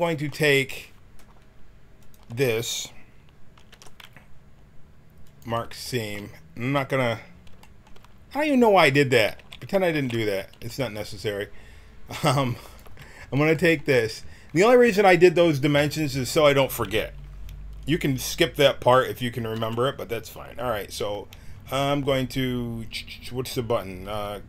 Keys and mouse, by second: 2.0-3.7 drag, 3.7 ctrl+e, 8.3 a, 9.4 ctrl+z, 10.1 ctrl+z, 10.5 a, 12.6-14.4 drag, 19.5 t.